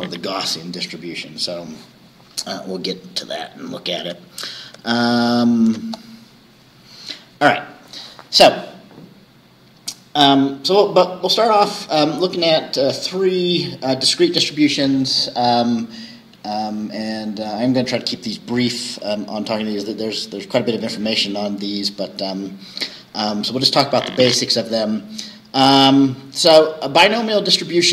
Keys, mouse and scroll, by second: 4.1 alt+Tab, 4.8 alt+Tab, 5.8 alt+Tab.